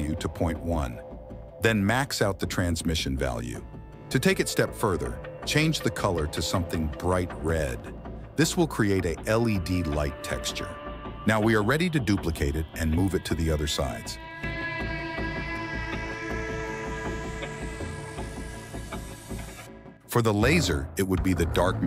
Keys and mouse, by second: 1.6-2.6 drag, 3.0-4.3 drag, 6.0 middle click, 6.6-8.5 drag, 9.2 click, 9.4 click, 9.8 click, 12.8 /, 14.5 click, 14.9 click, 15.2 shift+d, 17.4 KP_1, 17.7 g, 18.8 shift+d, 19.8 click, 20.1 /, 20.5 click, 21.3 click.